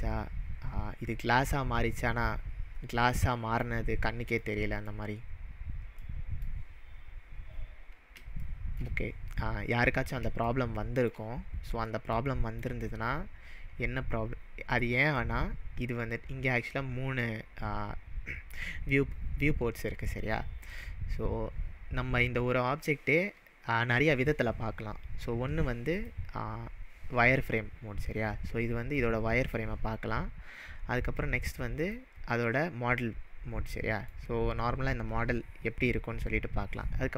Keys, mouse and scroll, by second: 3.1 scroll up 1, 3.3-3.8 middle drag, 5.2-6.1 scroll down 4, 6.1-6.6 middle drag, 25.9 click, 28.4-28.9 scroll up 2, 29.0-29.5 middle drag, 31.9 click, 33.7-34.3 middle drag.